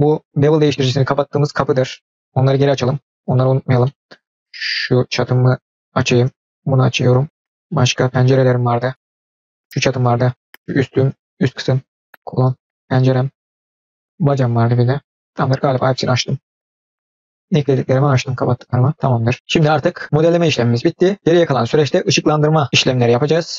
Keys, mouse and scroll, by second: 1.3 click, 2.5 click, 3.8 middle click, 4.4 click, 5.8 click, 6.4-7.0 drag, 7.5 scroll down 1, 7.5-7.9 middle drag, 8.0 middle click, 8.6 click, 9.0 click, 9.3 click, 9.4 middle click, 9.7 click, 10.4 click, 11.6 click, 11.9 scroll down 2, 12.0 middle click, 12.2-12.5 scroll up 2, 12.7 click, 13.3 click, 13.5-15.1 drag, 15.1 scroll down 1, 15.2 middle click, 15.5 click, 15.7-16.5 middle drag, 16.6 scroll up 1, 16.7 middle click, 17.7-19.1 middle drag, 19.3-19.9 scroll down 1.